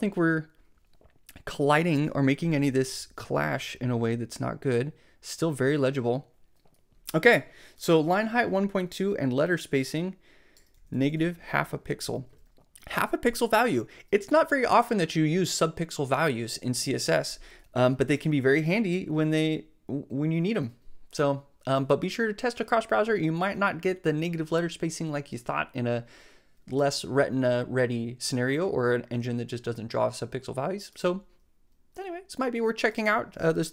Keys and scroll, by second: 10.8 super+c.